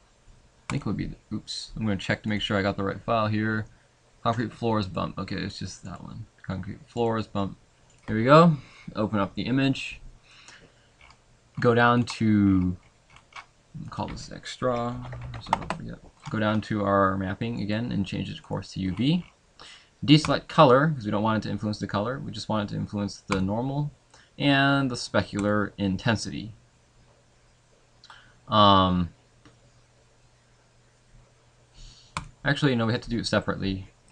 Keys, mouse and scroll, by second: 9.5 click, 10.4 middle click, 15.6 click, 33.5 click.